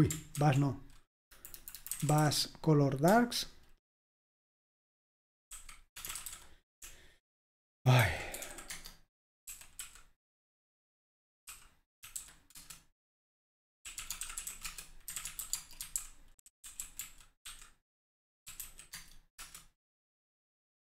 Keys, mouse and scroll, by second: 0.5 ctrl+a, 1.4 Delete, 1.6 Delete, 1.8-2.8 typing, 4.5 ctrl+w, 5.4-10.1 typing, 7.6 Right, 7.7-8.1 Right, 12.0-12.7 typing, 13.8-19.1 typing, 19.4 Return.